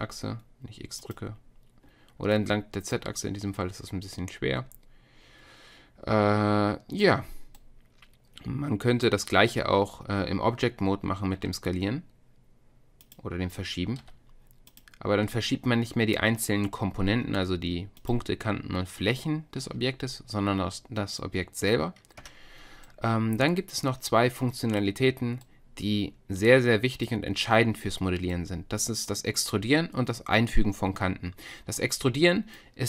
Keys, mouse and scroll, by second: 2.3-6.3 middle drag, 7.2-9.4 middle drag, 9.4 Tab, 11.4 s, 14.0 g, 17.1 Tab, 18.0-19.8 drag, 19.6 Tab, 22.2 Tab, 22.9-26.0 drag, 31.8 click.